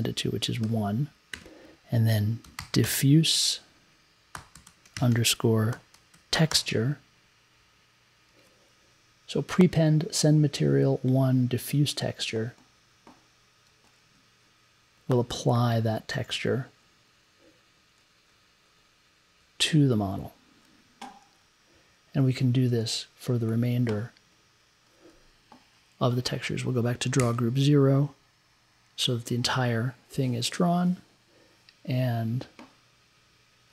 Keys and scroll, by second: 0.6-7.1 typing, 8.3 e, 27.2 Down, 28.8 Down.